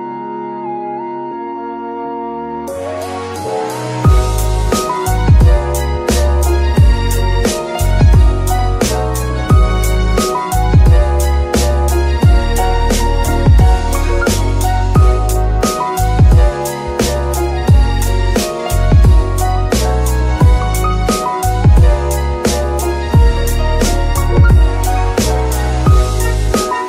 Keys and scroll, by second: 1.8 g, 2.7 ctrl+r, 5.6 KP_7, 6.2 g, 9.4 KP_7, 10.6 g, 11.2 x, 14.3 g, 16.2 g, 16.6 Escape, 17.5 g, 19.0 g, 22.5 F2, 23.1 BackSpace, 23.3 BackSpace, 23.4 BackSpace, 23.5 BackSpace, 24.1 Left, 24.2 Left, 25.0 Left, 25.6 Left, 25.9 Left, 26.4-26.8 typing.